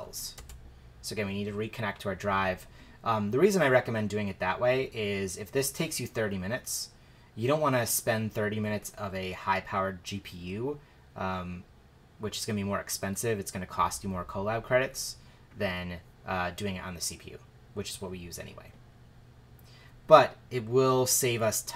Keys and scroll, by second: 0.3 shift+Return.